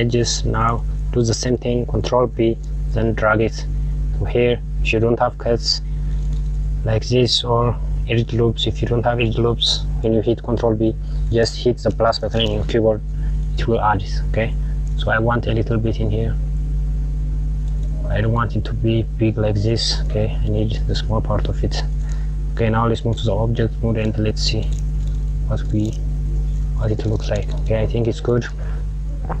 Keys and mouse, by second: 2.3 ctrl+b, 17.9 click, 20.5 click, 23.2 Tab, 24.1 click, 24.5 KP_Subtract, 25.7 click.